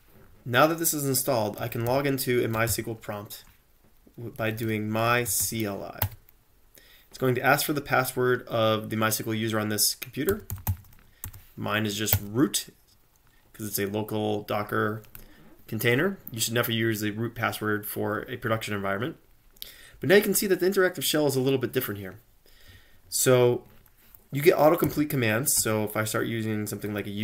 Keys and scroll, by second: 1.4-3.2 typing, 4.4-5.9 typing, 6.1 Return, 10.1-11.3 typing, 12.1 Return, 24.9-25.6 typing, 26.9 Tab.